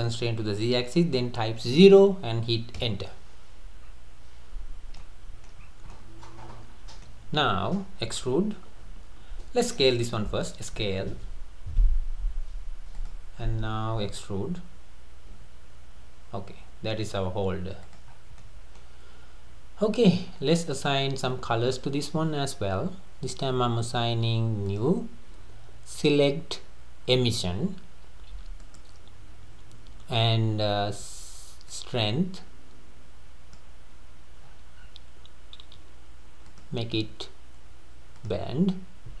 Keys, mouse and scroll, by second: 3.9 scroll up 2, 5.0-5.6 shift+middle drag, 5.6 scroll up 1, 5.9-9.1 middle drag, 10.5 s, 13.4-14.1 scroll down 3, 15.3 e, 18.1-18.4 scroll down 4, 18.4-19.9 middle drag, 19.9 Tab, 20.2-20.7 scroll down 3, 20.8 scroll up 3, 24.7-29.0 drag, 31.7-34.4 drag, 34.4-35.4 scroll down 9, 36.5-39.2 drag.